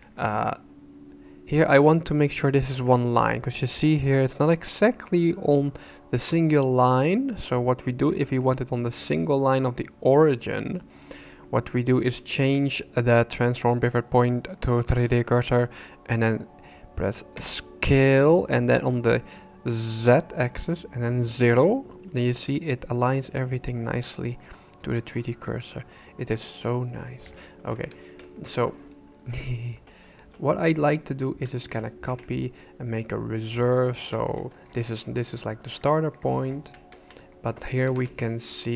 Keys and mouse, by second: 6.4 shift+middle click, 12.7-14.9 drag, 17.4 s, 22.7 shift+middle click, 24.0 shift+middle click, 26.0 shift+click, 27.8 Tab, 28.3 shift+click, 31.4 shift+d, 32.3-33.9 ctrl+drag, 35.7 right click, 36.2 right click, 36.7 Tab, 37.3 shift+click, 37.9 alt+a.